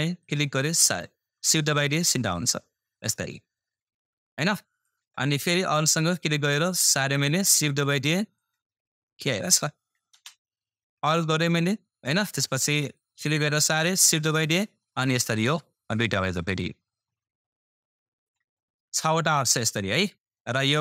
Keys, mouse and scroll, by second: 0.2-10.1 alt+drag, 10.1 super+space, 13.0-20.6 alt+drag, 18.4 typing.